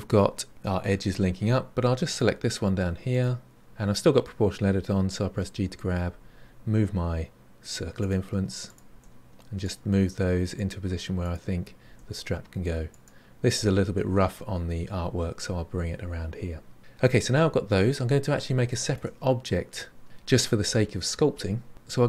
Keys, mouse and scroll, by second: 0.1 middle click, 2.1 click, 3.1 click, 8.6 click, 10.5 click, 17.8-18.6 scroll down 4, 18.6-20.0 shift+middle drag.